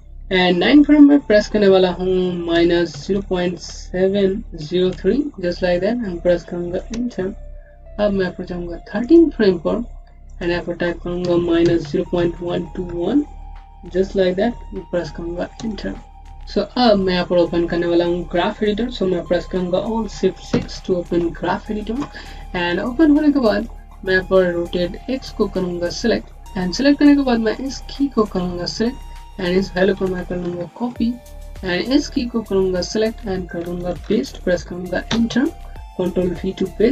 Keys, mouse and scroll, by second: 2.4 BackSpace, 2.8 KP_0, 5.3 KP_3, 6.8 KP_Enter, 8.9 click, 13.4 KP_1, 15.4 KP_1, 16.4 click, 20.4 alt+shift+6, 22.5 click, 27.4 click, 30.3 ctrl+c, 31.1 click, 33.9 ctrl+v, 34.9 KP_Enter.